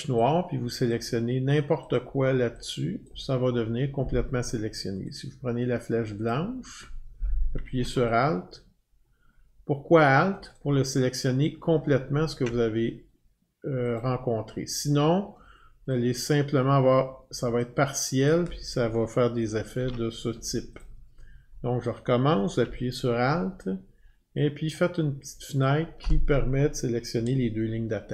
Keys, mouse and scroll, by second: 0.9 click, 2.0 click, 10.6 alt+click, 14.0 click, 15.9 click, 18.3 click, 19.8 ctrl+z, 20.8 click, 25.6 alt+click.